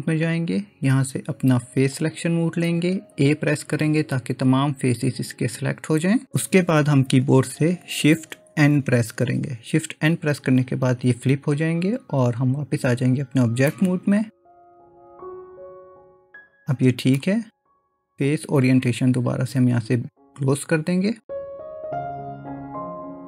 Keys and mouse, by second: 2.0 click, 4.3 a, 8.7 shift+n, 12.9 Tab, 13.7-17.2 middle drag, 18.4-20.9 drag, 22.8 click.